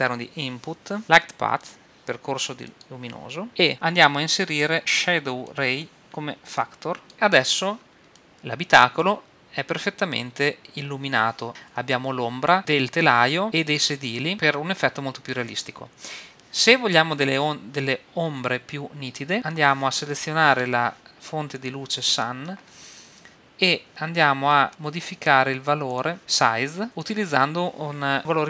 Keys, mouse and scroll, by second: 2.8 click, 5.5-7.1 drag, 7.1 middle click, 8.0 middle click, 15.4 middle click, 21.6-23.7 drag, 24.5-26.2 middle drag, 25.9 click, 26.9-28.4 drag.